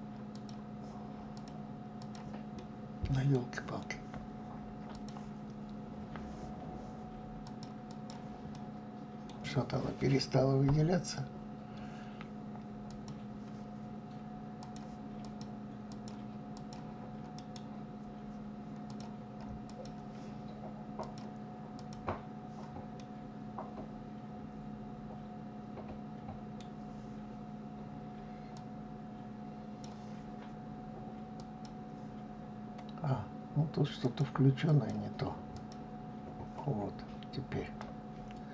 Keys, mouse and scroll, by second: 0.9 click, 1.5 click, 2.1-4.5 middle drag, 4.5 click, 7.0 click, 7.5 click, 8.2-11.2 middle drag, 12.5 click, 14.2 click, 14.7 click, 15.5 click, 16.1 click, 16.9-18.5 right drag, 18.5 click, 19.3 click, 20.6 click, 21.4 click, 22.6-25.6 middle drag, 28.1-31.2 drag, 33.6 click, 35.1 click, 36.5-37.0 scroll up 4, 37.4-38.5 middle drag.